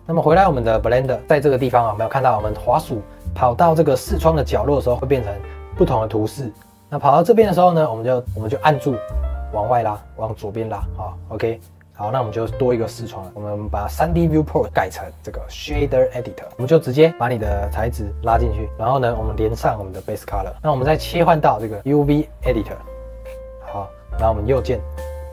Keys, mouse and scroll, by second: 0.2 scroll up 1, 0.4 shift+middle click, 0.8 scroll down 1, 1.0 shift+middle click, 8.3-25.3 drag.